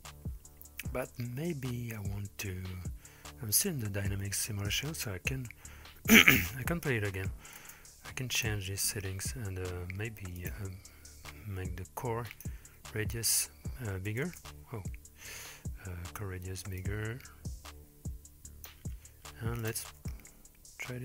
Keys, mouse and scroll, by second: 1.5-2.5 scroll up 4, 3.6-6.8 scroll up 4, 7.6 space, 8.4-10.4 drag, 12.3 click, 13.4 ctrl+space, 14.3 ctrl+space, 16.8-18.7 drag, 19.6-20.8 drag.